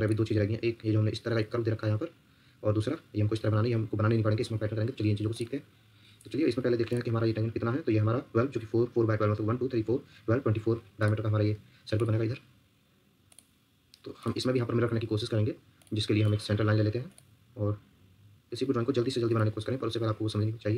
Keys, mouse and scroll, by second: 15.5 Escape, 19.8 Escape.